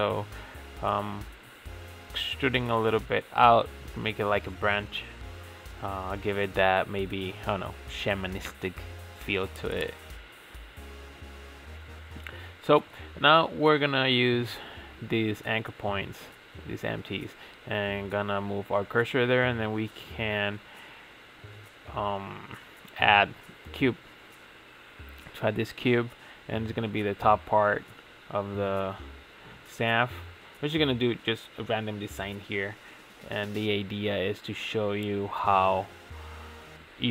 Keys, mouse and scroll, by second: 0.7 ctrl+a, 2.4 click, 3.4 click, 3.7 ctrl+a, 5.4-5.9 shift+middle drag, 5.9 click, 6.2 ctrl+a, 7.1 shift+middle click, 7.1 click, 7.5-9.3 middle drag, 9.3 click, 10.2-11.1 middle drag, 11.1 KP_Divide, 12.2 shift+s, 13.8 click, 13.9 KP_Divide, 14.8-15.3 shift+middle drag, 15.3 Tab, 15.5 scroll up 5, 15.7 ctrl+s, 15.9 ctrl+a, 17.4 Tab, 17.5-17.8 scroll down 2, 17.8 shift+a, 23.5 s, 24.3-24.8 middle drag, 24.8 3, 25.1 click, 25.4-27.1 middle drag, 27.1 click, 27.5 s, 28.8-29.4 middle drag, 29.4 click, 30.3 i, 31.5 e, 33.7 g, 35.2 s, 36.8 e.